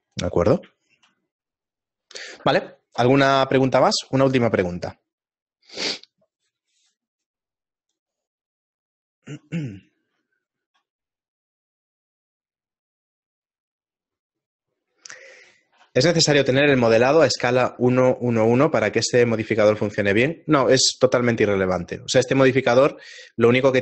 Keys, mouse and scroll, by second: 1.1 shift+middle click, 1.1-1.7 scroll down 5, 1.7 middle click.